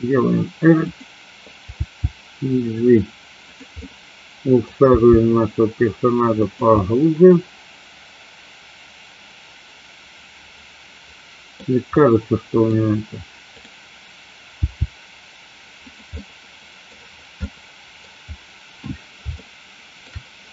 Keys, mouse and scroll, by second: 0.9 click, 1.8 g, 3.9-4.8 middle drag, 5.0 g, 6.5 click, 6.9-11.7 middle drag, 12.2-12.8 middle drag, 12.8 scroll down 1, 13.7 click, 14.8 g, 15.9 click, 16.1 middle click, 17.4-17.8 scroll up 2, 17.8 middle click, 18.0 scroll down 2, 19.4-20.2 shift+middle drag.